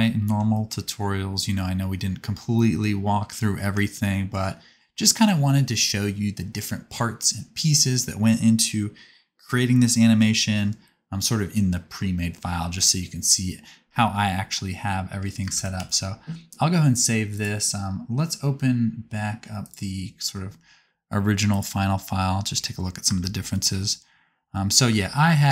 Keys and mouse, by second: 3.4-6.6 drag, 9.8-13.0 drag, 15.4 space, 15.8 ctrl+s, 16.2-22.0 drag, 22.0-23.0 middle drag.